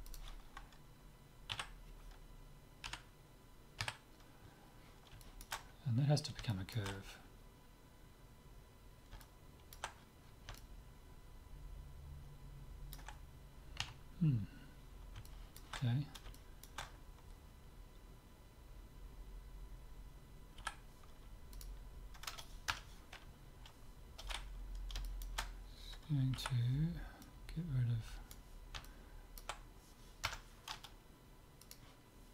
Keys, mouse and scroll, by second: 0.1-1.9 drag, 1.5 z, 2.9 KP_7, 3.9 KP_Decimal, 5.2-8.5 middle drag, 9.2-12.6 middle drag, 13.8 KP_3, 15.2-18.3 middle drag, 20.6 c, 24.7-27.1 middle drag, 24.7 scroll down 1, 24.7 scroll up 1, 26.3 c, 31.6-32.3 drag.